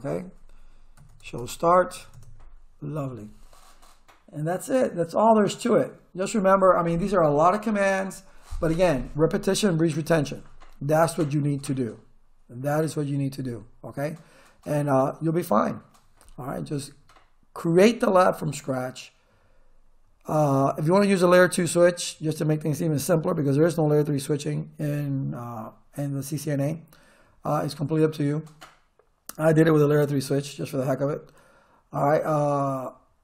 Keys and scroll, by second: 0.7-2.5 typing.